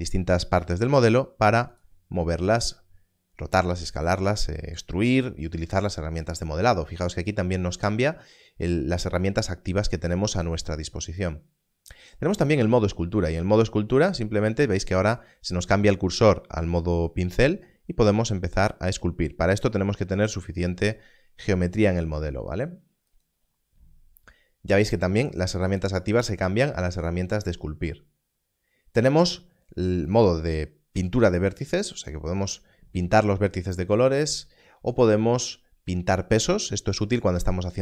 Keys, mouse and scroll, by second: 0.6 g, 1.7 right click, 11.1 click, 17.0 click, 27.2 click, 30.0 click, 34.2 click.